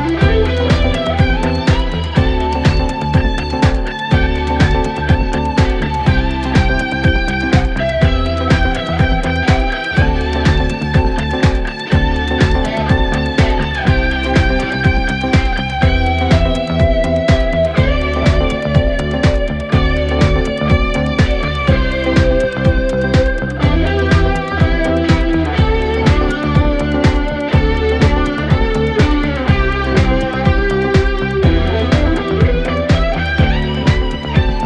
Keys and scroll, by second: 1.7 3, 7.4 ,, 11.4 Delete, 13.0 ctrl+F1, 15.2 4, 16.7 ctrl+d, 16.8 Escape, 19.1 ctrl+F1, 19.5 2, 20.3 ctrl+F1, 23.9 4, 25.4 4, 32.2 ctrl+z, 32.6 3.